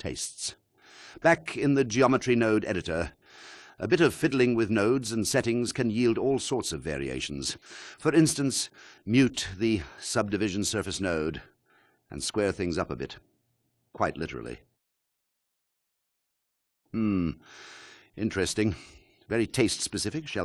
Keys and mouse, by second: 0.8-2.1 drag, 4.6 alt+shift+click, 5.8 alt+shift+middle click, 7.0 click, 8.9 m, 12.2 click, 12.9 click.